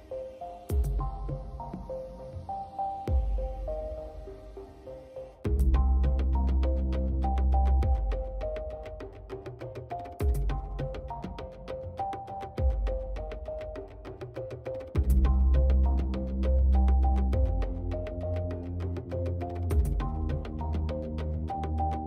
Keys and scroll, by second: 1.3 space, 6.3 space, 12.8 space, 16.4 space.